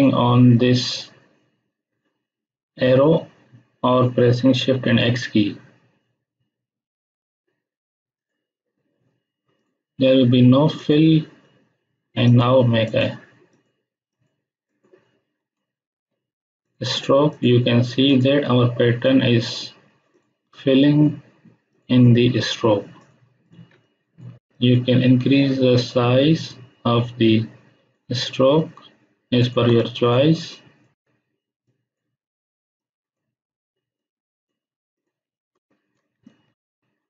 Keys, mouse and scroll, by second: 8.2 click, 13.0 click, 16.6-23.7 shift+drag, 23.7-24.4 space, 29.6 space, 29.8-30.4 ctrl+drag, 31.6-33.3 drag, 35.1 space, 35.3 ctrl+click, 36.2 ctrl+click.